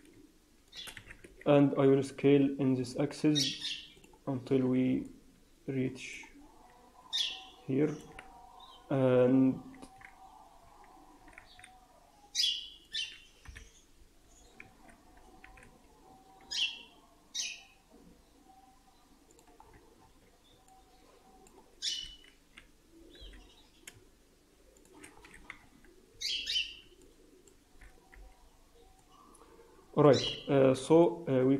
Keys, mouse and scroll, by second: 0.9 s, 4.2-4.9 scroll down 6, 4.4 Tab, 4.9 middle click, 6.3 scroll up 3, 6.4 Tab, 7.1 middle click, 11.1 s, 13.3 KP_1, 14.5 ctrl+z, 14.9-15.7 scroll up 2, 15.3 s, 19.4 Tab, 19.5 scroll down 4, 19.9-20.5 scroll up 3, 20.3 Tab, 20.6 alt+middle click, 22.4 g, 25.1-25.9 scroll down 2, 25.9 Tab, 26.1 Tab, 26.3 scroll up 2, 26.9 middle click, 28.0 t, 28.9 click, 30.1 t, 30.9 middle click.